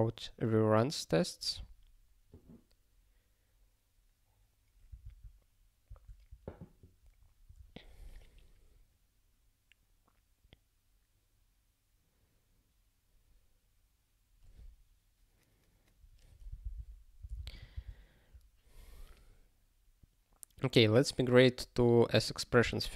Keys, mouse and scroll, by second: 8.2 scroll up 1, 16.6 super+b, 21.4 scroll up 1.